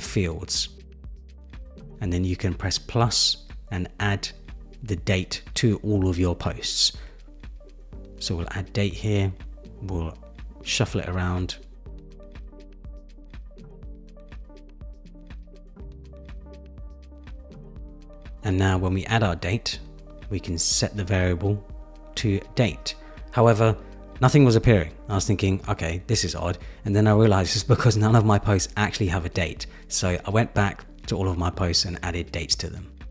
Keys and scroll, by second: 6.7 Return, 14.0 super+c, 14.2 super+v.